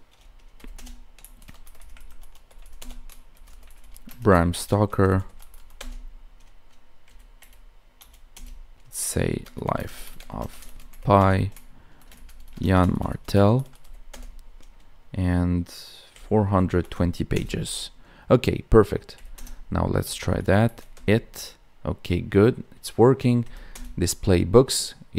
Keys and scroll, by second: 4.0 space, 9.7 space, 10.3 space, 12.5 space.